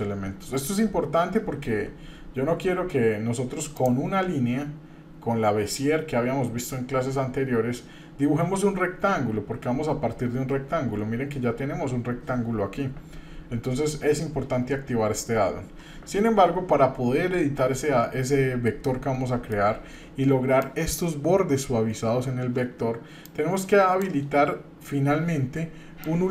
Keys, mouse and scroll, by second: 3.7-15.9 drag, 18.8 middle click.